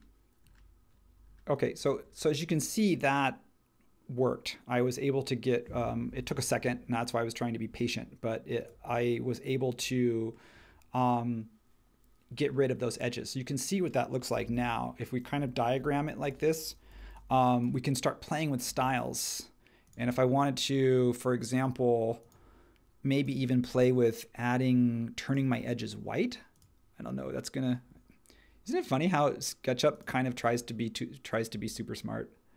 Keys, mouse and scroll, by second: 14.5 super+1, 15.7 h, 16.9 h, 18.6 space.